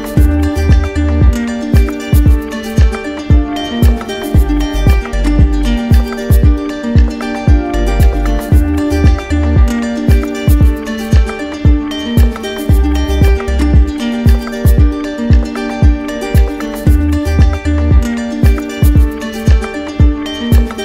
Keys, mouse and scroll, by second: 0.0 click, 2.8 click, 3.8 click, 5.9 click, 7.2 click, 8.7 click, 9.1 alt+click, 10.0 click, 10.8 alt+click, 11.9 ctrl+d, 13.0 alt+click, 14.5 q, 15.8 alt+click, 17.0 alt+click, 20.0 click.